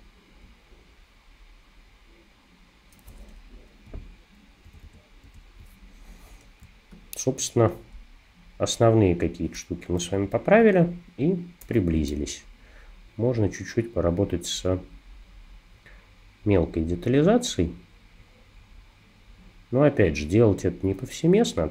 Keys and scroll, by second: 4.7 super+=, 4.9 super+=, 5.3 super+=, 6.6 space, 10.1 [, 11.7 2.